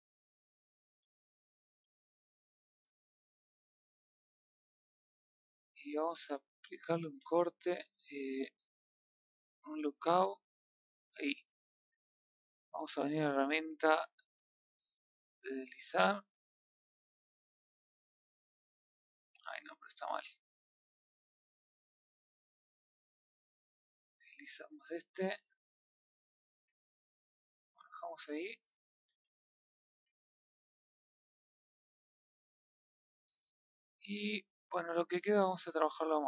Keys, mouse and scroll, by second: 0.1 middle click, 0.9 scroll down 1, 1.2 middle click, 1.7 g, 3.8-6.0 middle drag, 6.0-6.3 scroll up 2, 6.3 middle click, 7.0 ctrl+r, 9.1 click, 10.7 click, 13.7 click, 17.0-19.3 middle drag, 19.3 ctrl+z, 26.8 ctrl+z, 27.3 middle click, 27.8 Tab, 29.2 scroll down 2, 29.4-29.9 middle drag, 29.9 a, 30.2-36.2 middle drag.